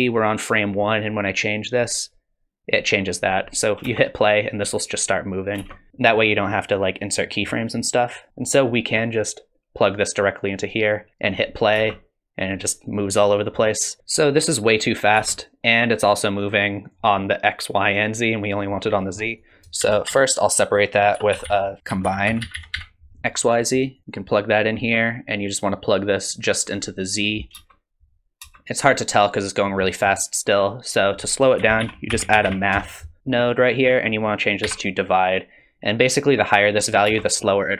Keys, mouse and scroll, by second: 0.8 click, 3.9 space, 5.6 space, 5.9 shift+Left, 7.2 middle click, 7.8 click, 8.3 middle click, 8.3-9.2 scroll down 2, 9.2 click, 11.8 space, 15.4 space, 16.7 click, 18.4 click, 19.4 click, 19.8 shift+a, 21.8 x, 21.8 shift+a, 24.1 click, 25.8 click, 27.2 click, 27.6 space, 28.4 space, 29.8 middle click, 30.6 click, 31.1 click, 31.6 shift+a, 34.3 click, 37.1 space, 37.4 click.